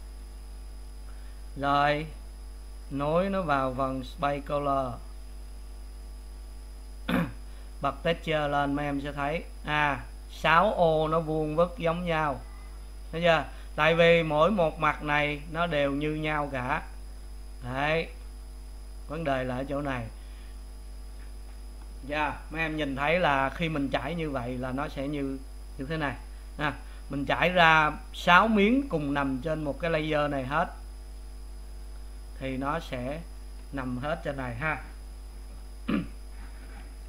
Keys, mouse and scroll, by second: 4.3-5.8 drag, 6.9 click, 7.8-8.2 scroll up 3, 9.1-12.8 shift+middle drag, 15.0-19.1 middle drag, 20.7-30.5 middle drag, 30.5 click, 31.8-32.9 drag.